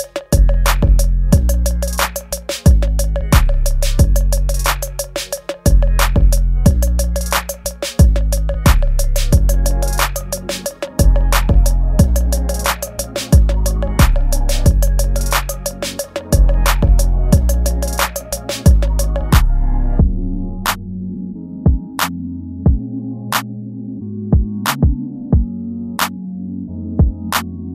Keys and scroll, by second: 0.8 ctrl+s, 1.7 space, 8.2 space, 9.4 ctrl+z, 10.8 ctrl+c, 12.1 space, 17.9 space, 23.2 ctrl+s, 27.1 ctrl+z.